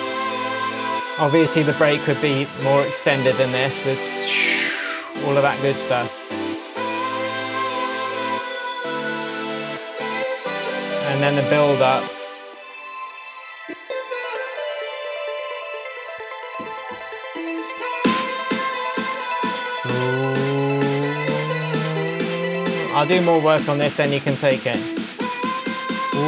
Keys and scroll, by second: 13.6 space.